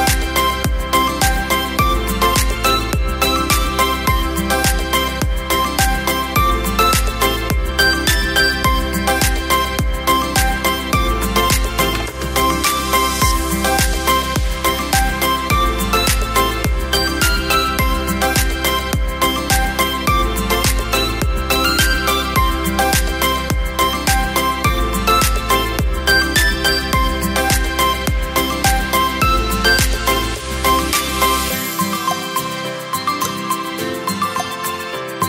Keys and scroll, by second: 0.2 Up, 0.4 Up, 1.9 space, 4.7 space, 6.7 space, 14.3 Delete, 17.7 v, 19.1 space.